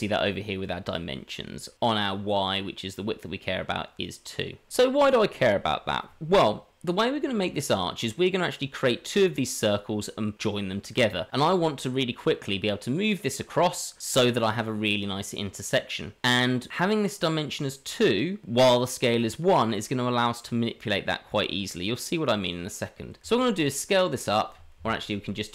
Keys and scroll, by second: 4.7 ctrl+a, 4.7 ctrl+z, 23.2 s.